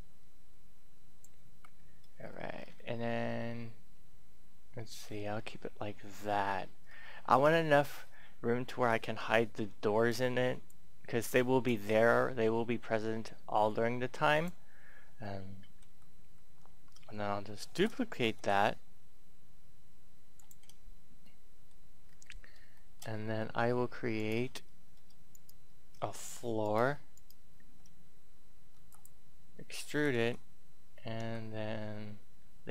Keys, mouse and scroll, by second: 1.4 Tab, 2.7-3.8 scroll up 1, 3.8-4.6 scroll down 1, 6.8-7.6 scroll up 1, 7.6-9.9 scroll up 1, 10.0-14.7 drag, 14.7-15.2 scroll down 1, 17.5-18.8 typing, 20.1 click, 21.2 middle click, 22.0-22.6 scroll up 1, 22.7 shift+middle click, 23.0-24.1 scroll up 1, 24.1 right click, 25.3 shift+right click, 26.5 shift+right click, 27.1 shift+right click, 28.5 e, 28.7 click, 29.8 s, 30.1 x, 31.0 y.